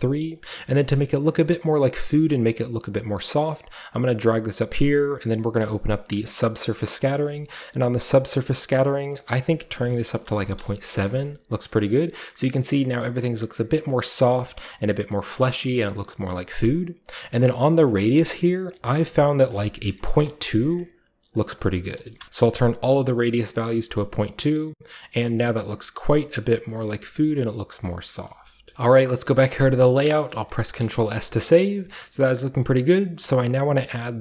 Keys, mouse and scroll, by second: 0.0-0.4 typing, 0.0-0.5 scroll up 1, 0.2 middle click, 0.5 scroll down 1, 0.8-2.0 middle drag, 2.0-8.1 drag, 8.1-9.0 scroll up 2, 8.3 middle click, 9.0 scroll up 1, 9.0-10.2 drag, 10.2 typing, 10.6 Return, 11.6 typing, 11.9 middle click, 13.1-13.9 middle drag, 14.1-16.3 middle drag, 18.7-22.4 drag, 21.3-22.1 typing, 22.2 Return, 22.4 ctrl+alt+Left, 22.5-23.5 middle drag, 23.4-25.1 scroll down 1, 23.8-24.3 middle drag, 24.5-25.1 middle drag, 25.3-26.6 middle drag, 25.3-26.2 scroll up 1, 26.2-27.5 scroll down 1, 26.8-27.6 middle drag, 27.5-28.6 scroll down 1, 27.8-28.1 middle drag, 27.9 a, 28.3 a, 28.7 ctrl+b, 29.5 click, 30.2 middle click, 30.5 ctrl+s, 30.8 ctrl+shift+middle click, 31.1 z, 32.3-34.2 middle drag, 32.5-34.2 scroll up 1.